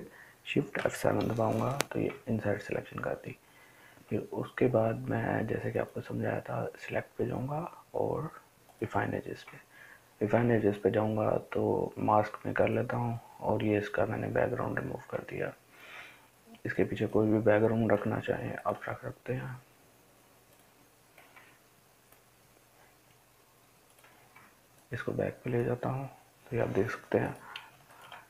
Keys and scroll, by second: 0.8 shift+F7.